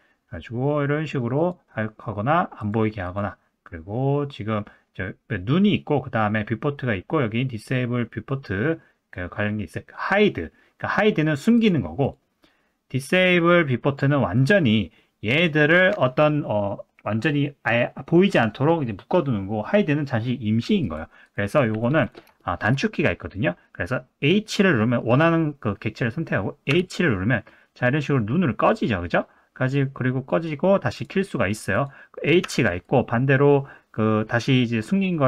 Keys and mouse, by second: 1.4 click, 2.6 click, 3.0 click, 11.6 click, 12.0 click, 14.3 click, 15.3 click, 20.8 click, 21.2 click, 21.8 drag, 22.4 shift+middle drag, 24.8 middle click, 26.7 h, 30.9 click, 32.4 h, 32.9 click.